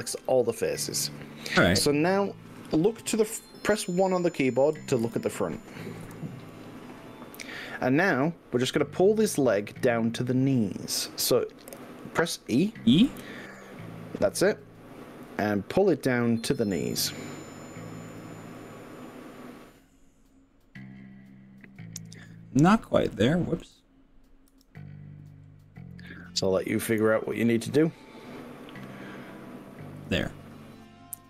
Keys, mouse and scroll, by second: 5.0 ctrl+KP_7, 6.1 KP_1, 6.2 ctrl+KP_7, 11.9 e, 16.0-16.4 scroll down 3, 18.2 click, 18.6 middle click, 19.3-20.2 scroll down 6, 22.1 scroll up 2, 22.9 shift+middle click, 24.6 g, 30.0 click.